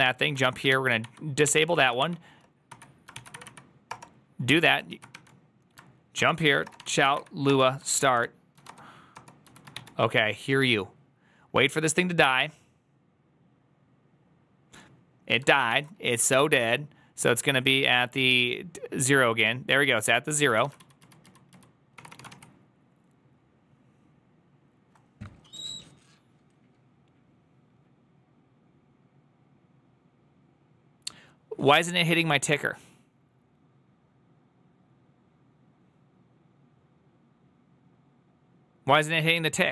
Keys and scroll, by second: 0.0-0.8 typing, 0.9 Up, 1.3 ctrl+c, 1.4 ctrl+c, 1.8 Up, 2.6 m, 3.0 ctrl+c, 3.0 Up, 3.2 Up, 3.7 Return, 4.8 ctrl+a, 5.0-10.1 typing, 7.7 Return, 7.7 ctrl+a, 8.0 Return, 9.0 Return, 17.7 ctrl+a, 17.7 2, 20.6 ctrl+a, 20.6 [, 20.7 ctrl+u, 20.9 ctrl+u, 21.1 ctrl+u, 21.4 ctrl+u, 22.1 ctrl+d, 22.1 shift+a.